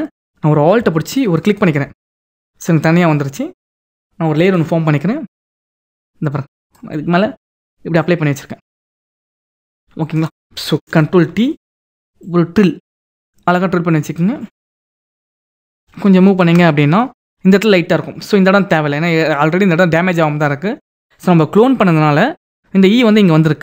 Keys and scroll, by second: 10.6 ctrl+t, 11.5 ctrl+t, 14.9 ctrl+=, 15.4 ctrl+=.